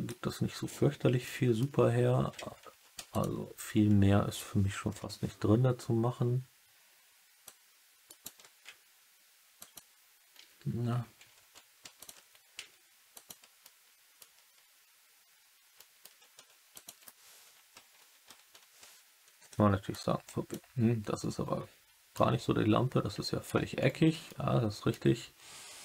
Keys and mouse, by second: 1.2 alt+middle click, 2.6 3, 3.0 alt+click, 4.8 KP_1, 7.4 click, 8.0 right click, 9.5 click, 11.9 alt+click, 13.1 click, 13.5 alt+middle click, 15.7 alt+middle click, 16.3 3, 18.4 KP_1, 19.8 click, 22.1-23.4 alt+middle drag, 24.2 alt+middle click.